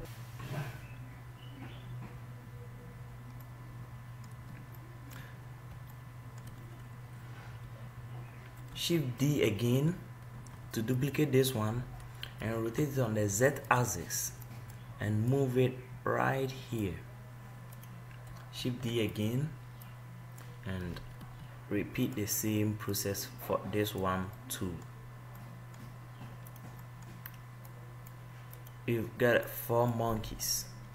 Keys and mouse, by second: 10.6 shift+d, 12.7 r, 14.8-17.5 drag, 18.0 right click, 19.0 shift+d, 20.3-21.7 drag, 21.1 r, 23.3 right click, 23.9 click, 28.0 middle click, 30.4-30.9 middle drag.